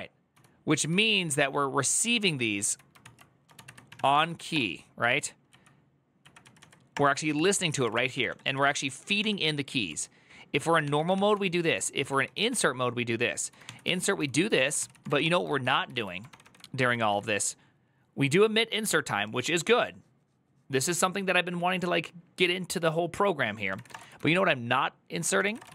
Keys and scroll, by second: 0.0-0.8 typing, 2.0 ctrl+c, 2.4 ctrl+o, 3.1-4.6 typing, 5.3 Up, 6.0 Up, 6.2 Down, 6.4 Down, 6.4-15.4 typing, 15.6 ctrl+u, 16.4-17.2 typing, 23.4-25.7 typing.